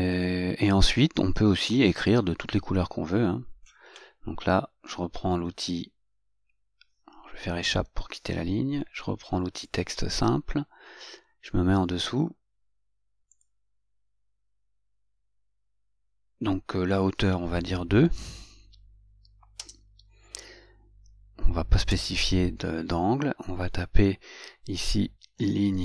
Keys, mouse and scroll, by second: 7.9 Escape, 9.9 click, 13.5 click, 19.8 Return, 22.1 Return.